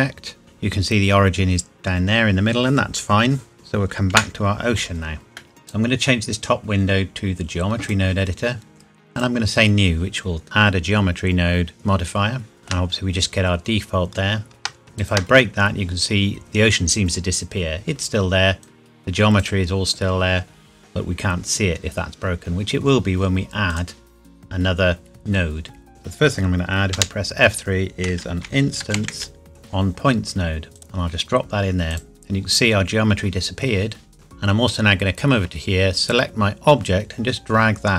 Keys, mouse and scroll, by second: 3.5 click, 4.1 KP_Decimal, 5.4 middle click, 5.8 click, 12.6 shift+middle click, 12.9-14.5 scroll up 1, 14.9 click, 15.0 ctrl+right click, 18.6 click, 23.7 click, 26.9 F3, 28.3-30.0 typing, 30.8 click, 36.0 click.